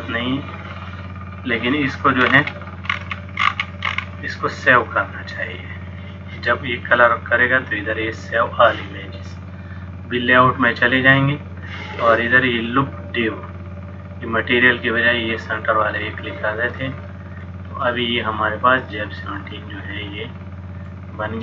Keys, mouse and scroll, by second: 10.3 click, 16.1 click, 16.9 middle click.